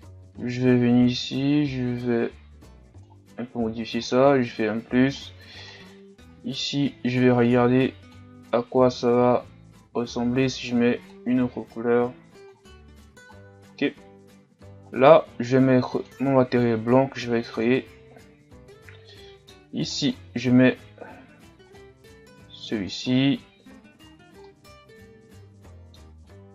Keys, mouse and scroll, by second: 0.3 scroll up 1, 0.5-8.6 drag, 13.4-13.7 scroll down 2, 13.7-14.9 middle drag, 14.9-17.6 right drag, 17.6-19.1 drag, 19.1 middle click, 20.0-22.9 right drag, 22.9 click, 23.7 a, 24.1-24.4 scroll down 1, 24.4-26.1 middle drag, 26.1-26.5 scroll up 1.